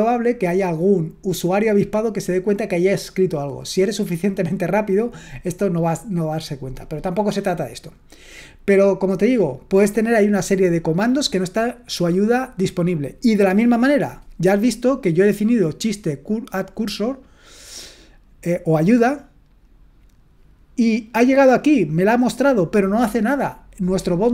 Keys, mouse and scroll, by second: 18.8-24.3 drag.